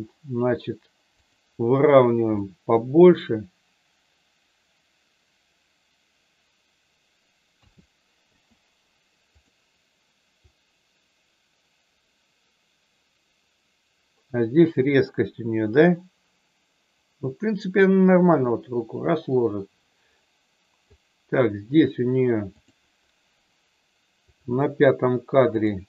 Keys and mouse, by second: 1.1 click, 2.4 middle click, 7.5 a, 8.1 i, 10.5-21.0 drag, 22.5 click, 24.2 click, 25.5 click.